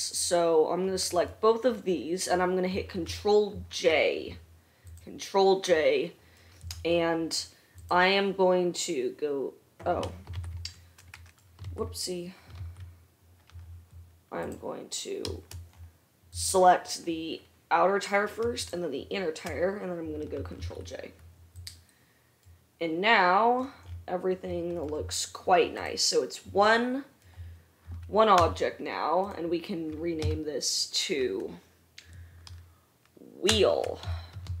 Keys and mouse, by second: 0.4 shift+middle click, 0.4 shift+right click, 3.8 ctrl+j, 5.1 middle click, 8.0 middle click, 10.7 ctrl+z, 11.9 ctrl+z, 12.9 ctrl+z, 14.6 middle click, 16.6 middle click, 18.7 shift+middle click, 20.8 ctrl+j, 21.9 middle click, 22.0 right click, 24.1-29.6 right drag, 25.9 click, 25.9 middle click, 28.6 g, 29.6-34.6 middle drag, 30.4 F2.